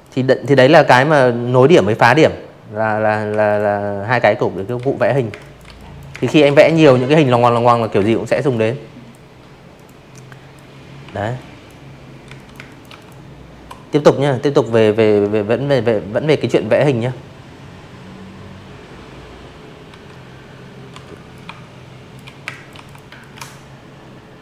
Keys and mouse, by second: 0.3 v, 0.4 click, 1.5 click, 1.8-5.3 typing, 1.9 click, 2.4 click, 2.7 click, 3.1 click, 4.2 click, 4.7 click, 5.0 click, 5.5 click, 6.7 click, 7.2 drag, 8.0 Delete, 8.3 drag, 9.2 z, 9.3 click, 9.5 space, 9.6 click, 9.8 v, 9.9 click, 16.9 c, 17.9 l, 18.3 shift+click, 19.4 space, 19.4 click, 19.7 v, 19.8 click, 20.1-22.0 alt+shift+drag, 22.3 click, 22.9-24.1 alt+shift+drag.